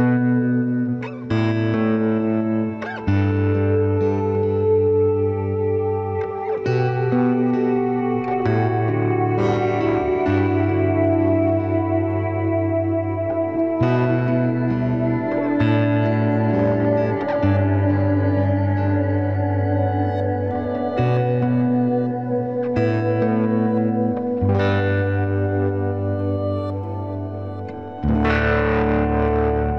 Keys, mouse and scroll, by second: 1.9 ctrl+s, 12.4-13.9 middle drag, 13.9 ctrl+r, 14.6 click, 14.9 ctrl+r, 16.7-18.6 drag, 17.4 g, 19.2-20.9 right drag, 19.4 g, 20.9 g, 21.9 g, 23.2 ctrl+Tab, 24.3 c, 26.4 i, 27.3 middle click, 27.7 z, 28.3-29.7 drag, 29.4 ctrl+b.